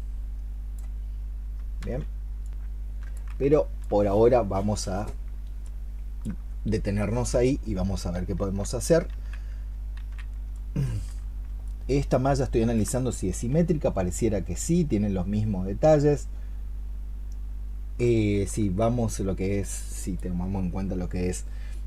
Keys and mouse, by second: 2.1 ctrl+z, 2.9 ctrl+z, 3.3 alt+click, 5.2 alt+click, 5.5 alt+click, 9.4 ctrl+z, 9.8 ctrl+z, 10.4 alt+click, 11.5 alt+click, 12.8 alt+click, 17.9 alt+click.